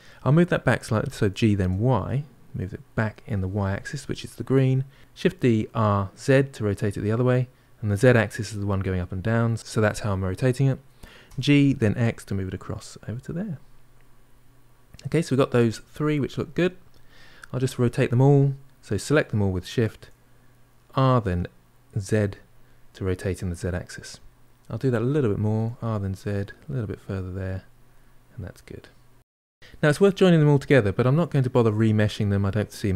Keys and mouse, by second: 1.0 g, 5.1 shift+d, 11.1 g, 13.8-15.5 middle drag, 15.5 shift+click, 15.8 shift+click, 16.2-17.6 middle drag, 17.6 r, 22.5-26.0 middle drag, 26.0 r, 27.5-29.1 middle drag, 29.6-32.9 middle drag.